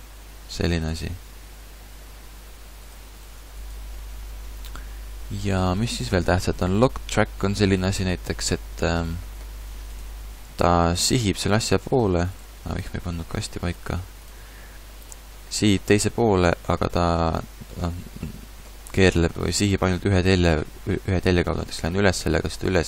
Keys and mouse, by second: 4.5-6.8 drag, 9.3 middle click, 9.9-13.7 right drag, 11.1 g, 14.6 middle click, 15.0-18.2 middle drag, 15.8 g, 20.8 g.